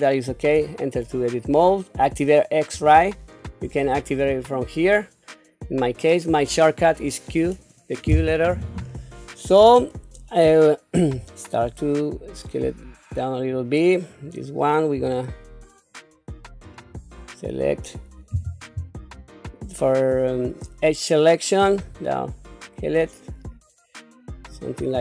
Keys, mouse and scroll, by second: 0.6 Tab, 2.8 q, 11.1 s, 14.1 click, 14.9 s, 18.3 2, 19.0 click, 21.8 s.